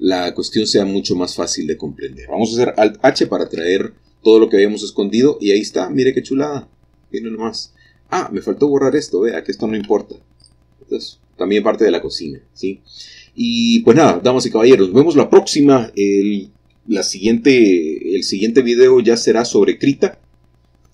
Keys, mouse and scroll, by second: 3.4 alt+h, 9.1-10.2 drag, 9.1 middle click, 10.2 x, 10.7 click.